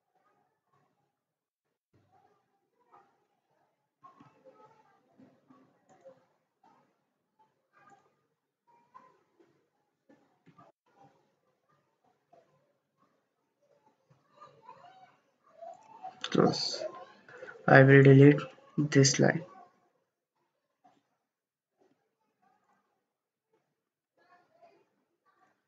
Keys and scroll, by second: 1.8 Return, 4.0 ctrl+z, 10.5 5, 10.8 Return, 18.5 Delete, 21.0 Escape, 22.0 Escape, 23.9 Delete.